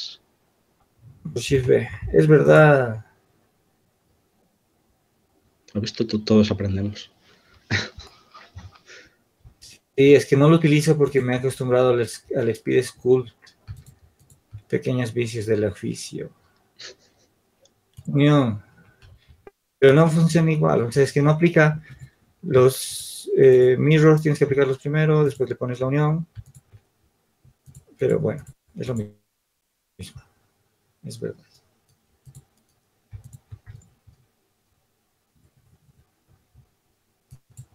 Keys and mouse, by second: 1.6 ctrl+shift+b, 7.2-9.1 right drag, 9.1 ctrl+z, 13.0 ctrl+z, 13.9-15.2 drag, 19.6 ctrl+z, 21.2-26.7 drag, 34.6-37.7 drag.